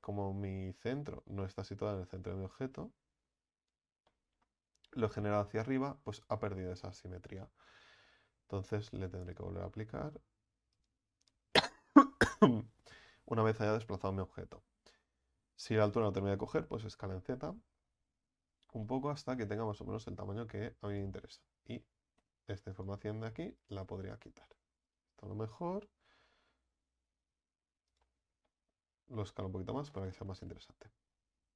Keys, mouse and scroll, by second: 2.5 click, 4.1-6.4 middle drag, 6.4 Tab, 6.8 Tab, 10.9-13.0 drag, 14.1 KP_1, 16.0 s, 18.8 middle click, 19.3 Tab, 19.9 Tab, 20.5-20.9 scroll up 1, 20.9 right click, 21.3 alt+shift+right click, 22.9 x, 23.6 right click, 24.0 alt+shift+right click, 24.9 alt+shift+right click, 26.1 alt+s, 28.1 Tab, 28.4-29.0 middle drag, 29.0-29.9 scroll down 3, 29.9-31.5 middle drag.